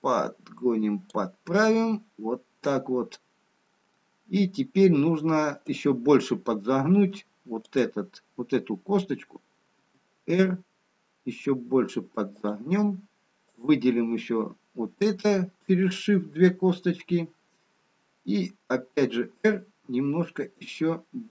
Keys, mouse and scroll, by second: 2.6 middle click, 5.9 click, 7.1 middle click, 8.2 click, 9.9 r, 14.3 click, 16.0 shift+click, 17.2 middle click, 19.4 r.